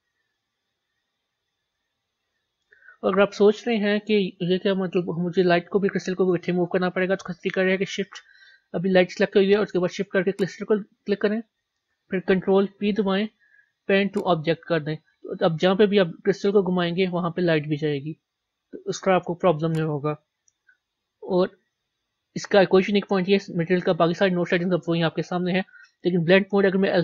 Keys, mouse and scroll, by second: 2.4-6.5 scroll up 3, 10.8 shift+click, 14.5 ctrl+p, 16.5 g, 23.8-27.0 middle drag.